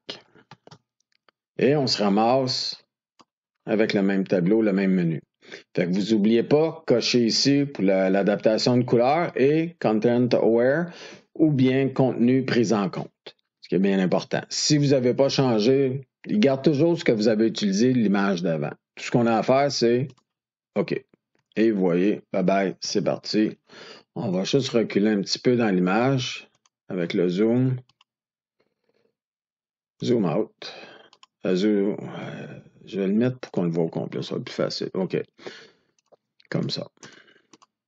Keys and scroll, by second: 0.2 shift+F5, 22.7 ctrl+d.